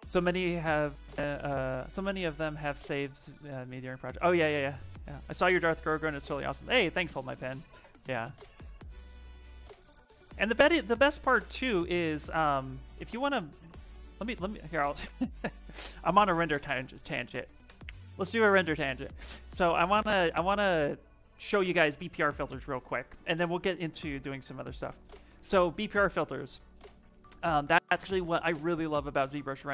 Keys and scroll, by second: 29.4 ,.